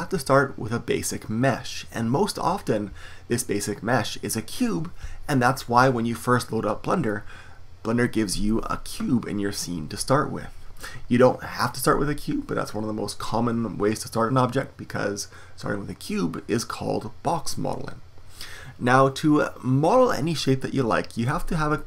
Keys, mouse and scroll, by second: 7.1-9.1 middle drag.